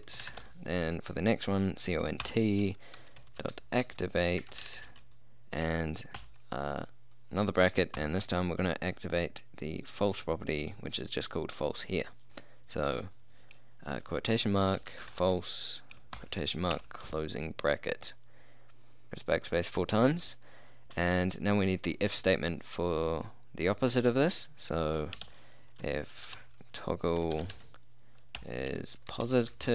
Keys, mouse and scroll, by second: 0.3 c, 0.3 o, 0.4 n, 0.5 t, 2.3-4.9 typing, 6.3 shift+9, 8.1 shift+', 14.9-16.8 typing, 19.1 Return, 19.1 BackSpace, 25.3-29.6 typing.